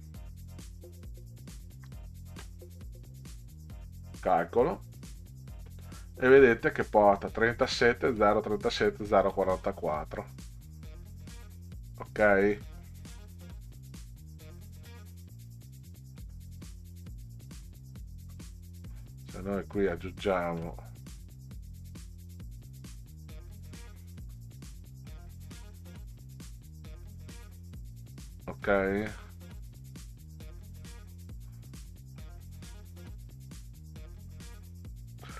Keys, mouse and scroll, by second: 1.7 1, 3.9 click, 9.8 click, 16.5 click, 19.3 click, 20.2 click, 21.2 click, 24.7 click, 28.5 click, 31.1 click.